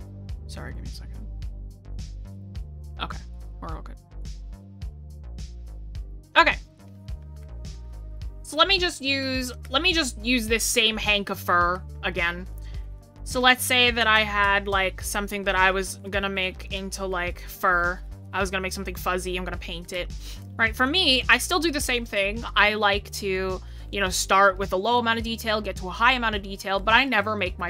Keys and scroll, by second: 9.5 scroll.